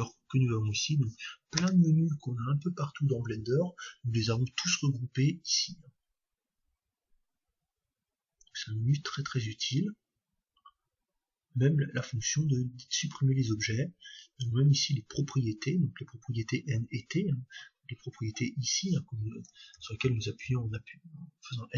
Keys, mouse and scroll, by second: 1.6 space, 20.2 n, 20.4 t, 20.7 n.